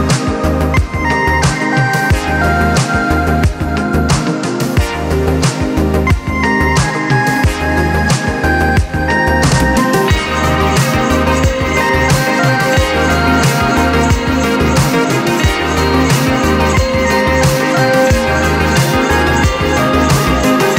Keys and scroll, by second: 0.9-1.5 typing, 2.1 Return, 6.1 BackSpace, 6.7 4, 7.0 Return, 14.1-15.1 typing, 18.3 s.